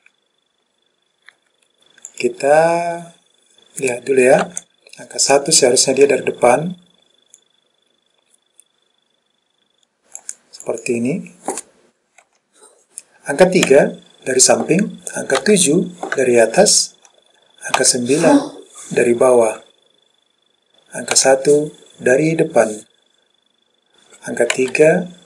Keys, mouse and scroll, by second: 0.0 KP_2, 2.2 click, 4.5 KP_1, 7.5 click, 10.7 click, 12.4 KP_1, 13.8 KP_3, 15.5 KP_7, 17.9 KP_9, 21.2 KP_1, 24.6 KP_3.